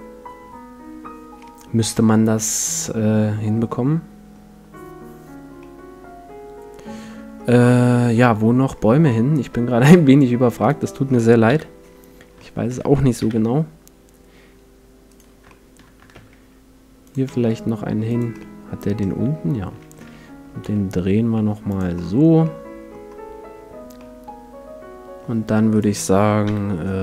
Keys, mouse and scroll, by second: 1.9-3.8 middle drag, 5.6-7.4 middle drag, 8.7-10.7 middle drag, 10.7-12.3 right drag, 11.5 KP_7, 12.3-14.0 middle drag, 13.2 KP_5, 15.1-16.8 right drag, 16.1 shift+d, 16.8 middle click, 17.1-20.1 drag, 17.3 s, 18.4 middle click, 19.3 right click, 19.7 middle click, 19.7 right click, 19.9 middle click, 19.9 r, 21.7 click, 22.1 click, 22.1 middle click, 22.4-24.0 drag, 22.7 middle click, 22.9 middle click, 24.0-25.7 middle drag, 25.7-27.0 right drag, 26.5 KP_7.